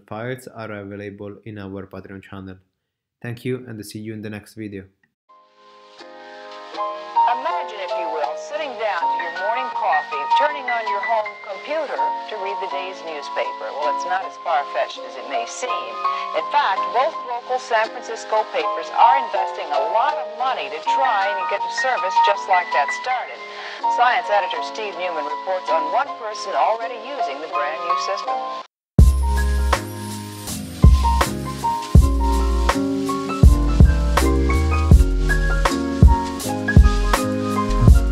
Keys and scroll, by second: 11.7 super+z, 17.7 x.